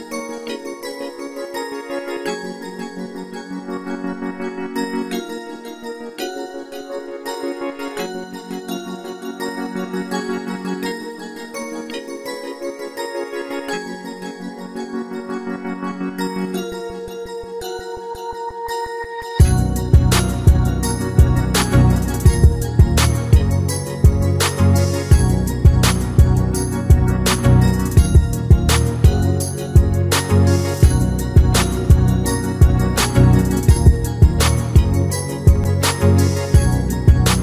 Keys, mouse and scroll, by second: 0.3 click, 1.3 click, 2.0 click, 3.7 click, 4.2 click, 4.3 g, 4.5 click, 5.2 g, 5.3 click, 5.6 scroll up 1, 6.0 shift+middle click, 6.2 shift+middle click, 6.2 scroll down 1, 6.2 click, 6.5 middle click, 6.5-11.1 typing, 6.7 shift+middle click, 9.6 click, 11.4 shift+middle click, 13.7 e, 15.5 s, 16.5 g, 16.7 s, 17.5 shift+middle click, 17.8-19.3 typing, 19.5-19.8 scroll down 3, 19.6 shift+middle click, 20.4 click, 20.4 scroll up 1, 20.7 e, 21.5 shift+middle click, 21.5 click, 24.2 scroll up 2, 24.3 click, 24.6-27.5 typing, 25.0 click, 25.5 click, 25.8 shift+click, 27.9 shift+middle click, 28.7-32.7 typing, 32.5 click, 33.3 click, 33.9 click, 34.4 shift+click, 35.0-37.4 typing.